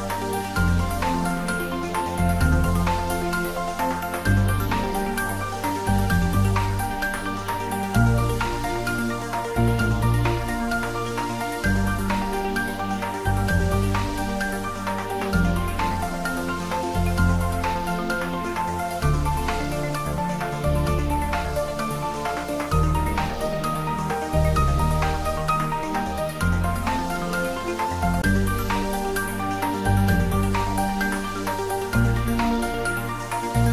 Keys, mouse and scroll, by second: 23.2-24.3 scroll up 1, 24.6-26.6 middle drag, 26.6-26.9 scroll down 1, 26.9-31.1 middle drag.